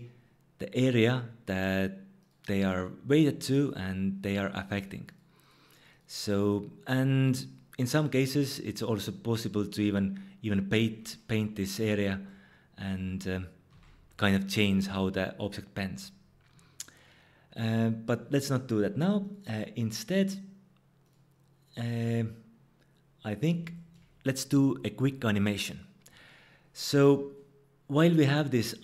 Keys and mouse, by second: 13.7 ctrl+z, 19.2-21.1 drag, 28.1 click.